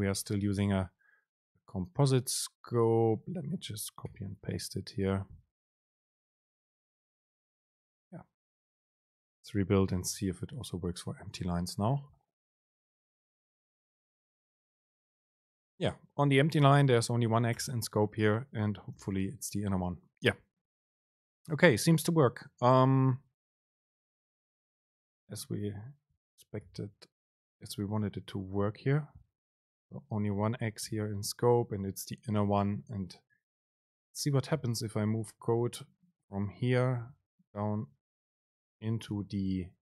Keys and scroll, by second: 4.5 super+c, 5.8 shift+Left, 6.5 super+v, 10.1 ctrl+shift+super+F9, 14.1 Up, 14.5 super+space, 19.3 super+b, 26.3 BackSpace, 27.6 BackSpace, 27.7 Return, 29.4 super+space, 30.9 super+b, 35.8 shift+Down, 36.6 ctrl+shift+super+Down, 38.0 ctrl+shift+super+Up, 39.2 super+x.